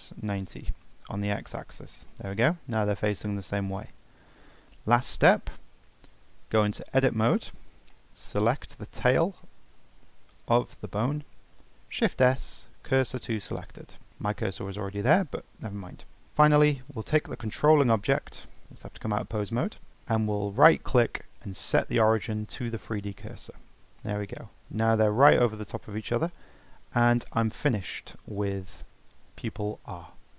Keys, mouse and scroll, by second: 2.1-5.2 middle drag, 5.3-6.0 scroll up 1, 6.0-6.8 scroll up 1, 6.8 Tab, 7.7 scroll up 3, 7.9 shift+middle click, 8.6 scroll up 3, 9.1 click, 9.4 shift+middle click, 10.3 click, 10.7 shift+middle click, 11.6 shift+s, 13.7-14.1 scroll down 5, 14.1-14.9 shift+middle drag, 14.9-15.3 scroll up 2, 15.3-16.1 middle drag, 16.1-16.8 scroll down 2, 16.8 click, 17.5 click, 18.7 ctrl+Tab, 19.3 click, 19.9 scroll up 1, 20.4-23.4 right drag, 24.0-27.0 middle drag, 27.3-27.7 scroll down 1, 27.7-30.3 middle drag.